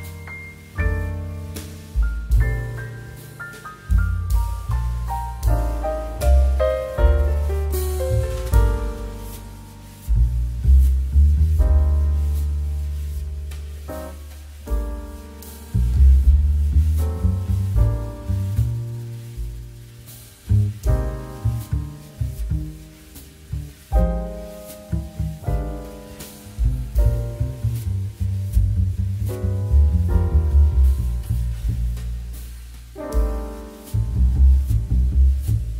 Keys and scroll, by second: 7.9 2.